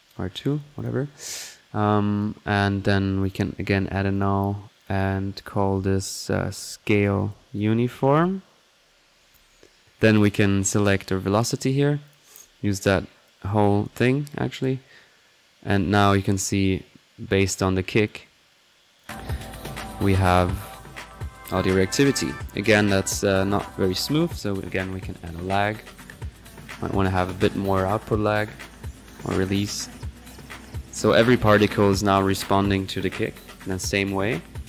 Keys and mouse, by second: 0.5-0.9 drag, 3.2-4.7 drag, 3.9-4.7 typing, 4.8 alt+click, 6.6 typing, 9.8 click, 10.8 click, 11.7 middle click, 12.0 click, 12.0 right click, 13.3 click, 13.4-13.8 typing, 13.6-14.8 drag, 15.2 middle click, 15.7 click, 17.9-18.3 typing, 17.9 click, 19.0-19.4 drag, 22.0-22.5 right drag, 23.4-24.5 drag, 24.2-25.0 typing, 24.9-25.2 drag, 25.4 click, 27.0 click, 28.2 click, 33.6 click, 34.3 click.